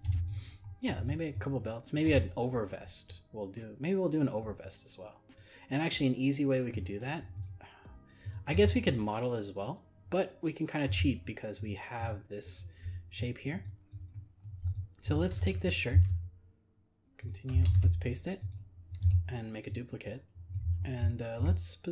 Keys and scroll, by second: 15.9 ctrl+c, 17.7 ctrl+v.